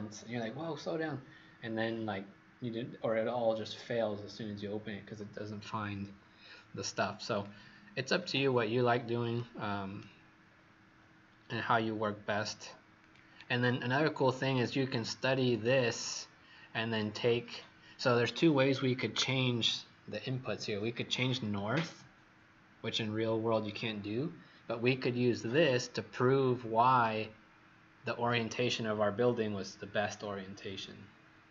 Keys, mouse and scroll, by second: 9.3 right click, 10.4 scroll up 3, 11.4 scroll down 1, 11.9 scroll down 1, 12.9 click, 13.5-14.1 scroll down 2, 16.0-21.4 scroll up 1, 25.5 click.